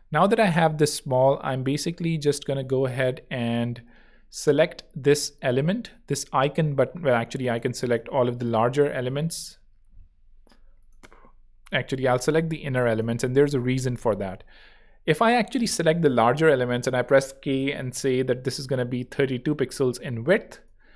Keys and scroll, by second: 9.2 alt+super+l, 16.4 k, 18.7-19.5 typing, 19.9 Tab, 20.6 Home.